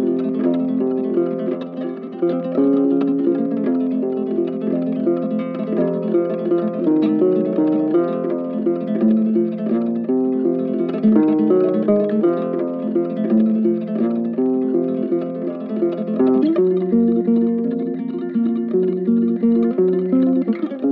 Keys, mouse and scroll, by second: 2.3 ctrl+z, 2.5 ctrl+alt+click, 3.1 ctrl+z, 3.7 ctrl+i, 7.2 ctrl+click, 9.5 ctrl+click, 17.8 right click.